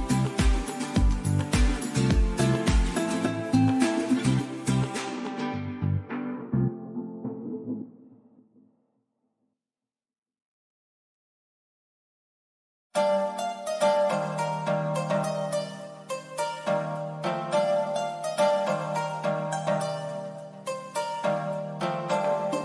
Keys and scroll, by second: 18.9 super+d.